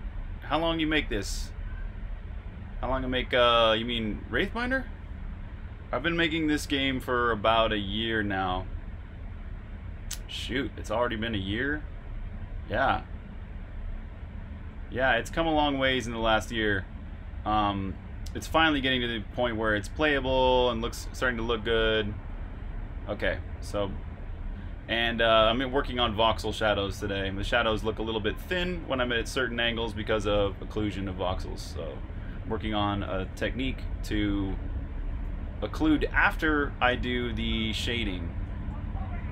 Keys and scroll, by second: 6.3 super+r, 6.5-7.4 typing, 15.2-18.1 typing, 19.5 typing, 23.5 typing, 32.9 super+q, 38.0-39.0 typing.